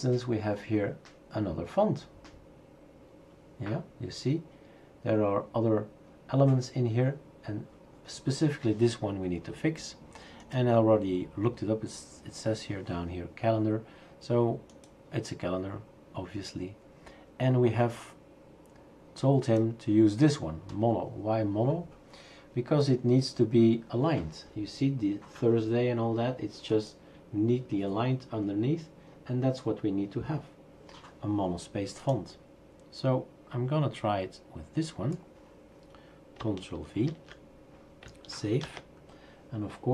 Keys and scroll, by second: 37.1 ctrl+v, 38.6 ctrl+s.